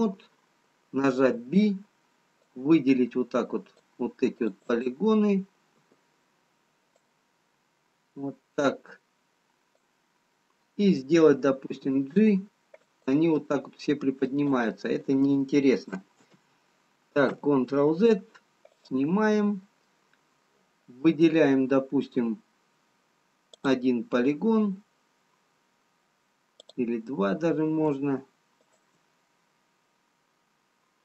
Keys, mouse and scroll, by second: 1.2 b, 4.4 click, 4.6 click, 5.6 b, 11.7 g, 13.3 middle click, 14.9 click, 16.2 ctrl+z, 17.6 ctrl+z, 18.7 click, 19.8 middle click, 22.4-24.2 scroll up 2, 24.2 click, 28.5 shift+click, 29.2 middle click.